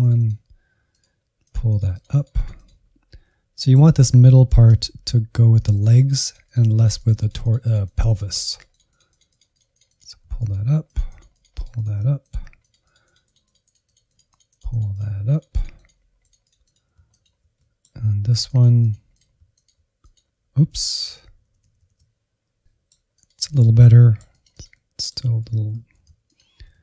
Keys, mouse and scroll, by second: 3.5 middle click, 4.4 shift+z, 5.5 shift+z, 5.9-10.5 drag, 10.8-12.3 drag, 12.5-16.5 drag, 16.5 middle click, 16.9 click, 17.5-19.1 drag, 19.1-19.6 ctrl+z, 19.9-21.3 drag, 21.3 scroll down 2, 21.3 Insert, 21.5 middle click, 21.6 Right, 21.7 Right, 21.8 Right, 21.9 middle click, 22.1 Left, 22.3 Left, 22.4 scroll up 2, 22.6 middle click, 22.9 click, 23.3 Insert, 23.4 middle click, 23.7 click, 23.9 middle click, 24.2 alt+z, 24.5 alt+z, 25.0 ctrl+click, 25.2 alt+z, 25.3 middle click, 25.6-26.7 drag, 26.7 Insert.